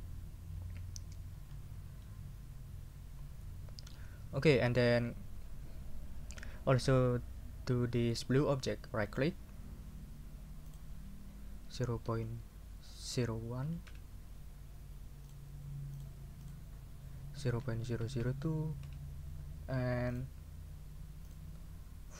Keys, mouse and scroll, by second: 1.3 scroll up 2, 2.0-4.1 middle drag, 4.7 scroll down 2, 9.0 right click, 10.7 click, 11.7 0, 12.0 ., 13.1 0, 13.6 1, 13.9 Return, 15.3 click, 15.9 click, 16.4 click, 17.1-18.7 typing, 18.8 Return, 20.1 click, 21.3 click.